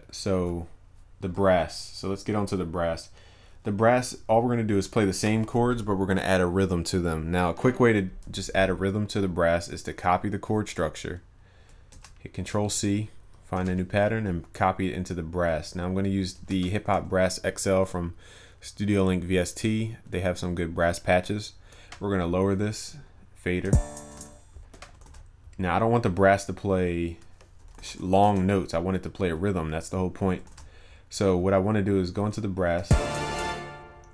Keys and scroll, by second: 12.0 ctrl+c, 16.4 ctrl+v, 25.0 ctrl+s, 30.6 ctrl+s.